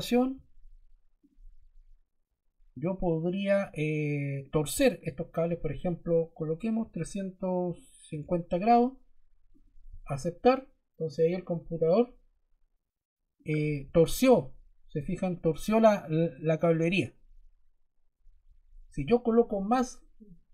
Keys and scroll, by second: 6.7 3, 7.8-8.7 typing.